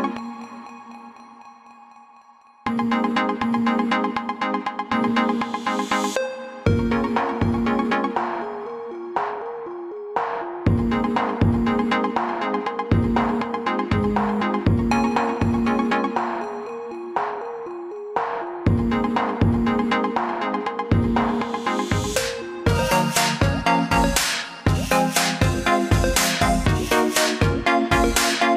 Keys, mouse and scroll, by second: 0.3 click, 5.4 click, 10.7 ctrl+z, 13.3 click, 15.4-17.2 scroll down 1, 17.8 click, 27.0 click.